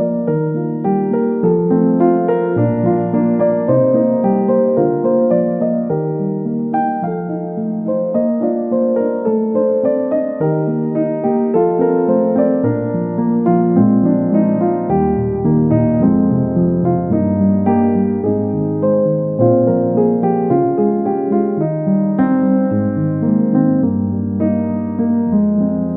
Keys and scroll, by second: 1.6 ctrl+c, 9.5 ctrl+z, 16.1 Delete.